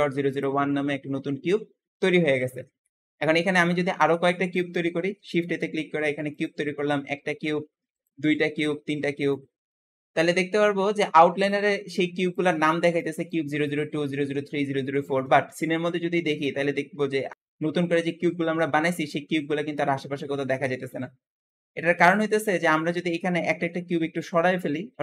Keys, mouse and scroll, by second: 3.2-5.0 scroll down 1, 5.0 shift+a, 7.0 shift+a, 8.2 shift+a, 15.5-16.3 scroll down 7, 16.3-18.7 middle drag, 19.5 Tab, 20.5 Escape, 21.5 Escape, 21.9-22.5 scroll up 4, 22.5 Tab, 23.0-23.6 scroll up 2, 23.6-24.7 shift+middle drag, 24.7 g.